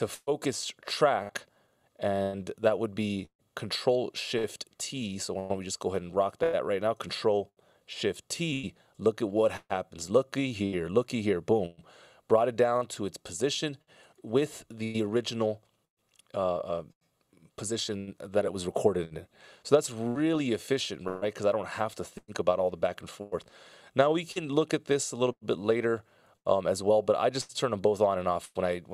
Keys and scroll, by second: 8.3 ctrl+shift+t, 19.6 super+z.